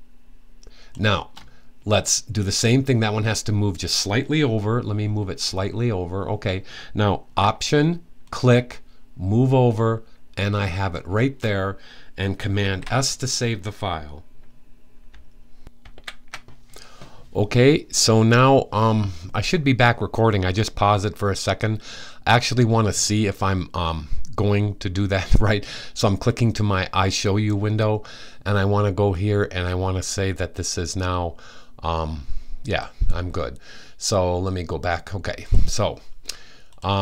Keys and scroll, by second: 4.7 Left, 5.2 Left, 11.1 Left, 12.3 super+s.